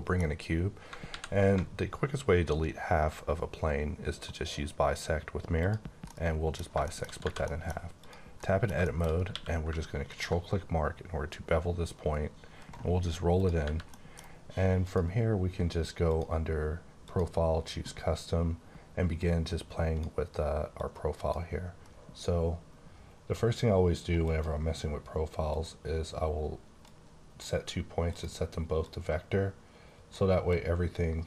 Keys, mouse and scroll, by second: 0.3 scroll up 3, 1.0 alt+x, 1.9 alt+scroll down 2, 3.2-4.2 scroll down 1, 5.6 click, 6.1 middle click, 7.2 Tab, 7.5 middle click, 7.9 click, 8.3 middle click, 8.8 middle click, 9.2 q, 10.0 ctrl+click, 12.1 scroll up 4, 13.4 click, 13.6 Tab, 13.8 middle click, 14.8 click, 16.0 click, 17.0 click, 19.1 click, 20.7 click, 22.1-23.2 scroll down 3, 24.2 click, 25.4 click, 27.1 click, 28.0 click, 28.8 click, 30.4 click.